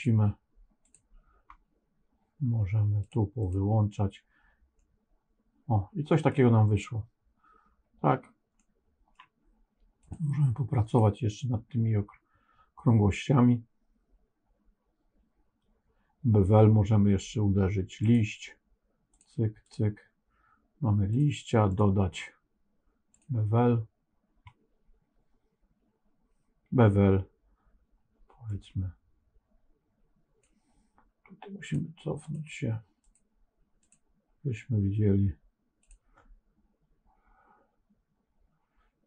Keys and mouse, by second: 0.7 click, 2.9 click, 3.3 click, 4.7-6.2 middle drag, 8.5 middle click, 10.8 click, 17.9 click, 19.0 click, 19.5 click, 21.0 click, 21.6-23.2 drag, 28.4-30.3 drag, 31.6 click, 32.2 click, 33.0 click, 33.7 click, 35.7-39.0 drag.